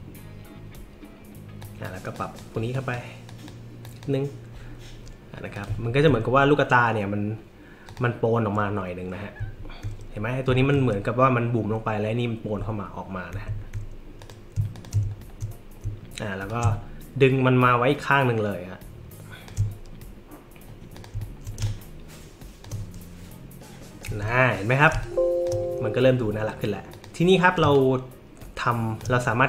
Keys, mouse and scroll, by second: 1.6 click, 2.1 click, 2.7 click, 3.3 click, 3.8 click, 5.5 click, 5.8 alt+scroll up 2, 6.0-6.5 alt+scroll down 3, 7.9 click, 9.5 alt+scroll up 2, 10.5 alt+middle click, 10.5 alt+scroll, 12.6 alt+middle click, 12.6-13.1 alt+scroll, 14.2 click, 14.7 shift+click, 15.2 alt+middle click, 15.2 alt+scroll down 1, 16.5-19.4 alt+shift+drag, 20.9 click, 21.3 alt+scroll up 2, 21.6 space, 21.6 click, 24.9 space, 25.0 click, 26.9 click, 27.6 space, 27.7-29.0 drag.